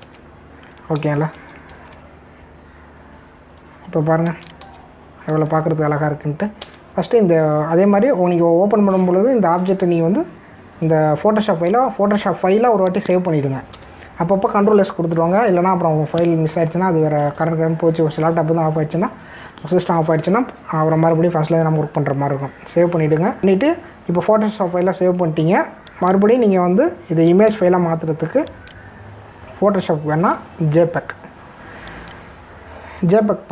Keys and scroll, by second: 1.0 Return, 2.3 ctrl+s, 2.7 ctrl+d, 5.6 ctrl+d, 7.6 ctrl+s, 14.7 v.